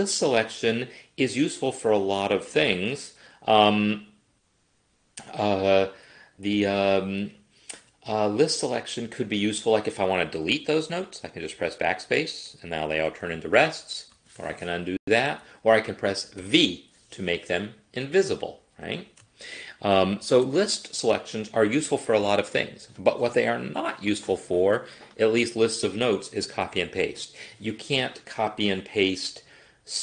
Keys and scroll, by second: 11.6 BackSpace, 14.2 ctrl+z, 16.4 v, 20.1 ctrl+z.